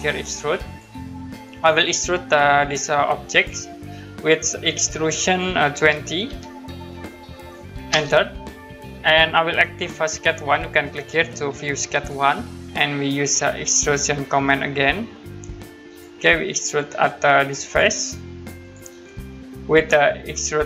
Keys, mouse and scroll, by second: 0.6 click, 3.3 click, 5.7 2, 7.9 Return, 10.1 click, 11.9 click, 15.9 click, 17.7 click.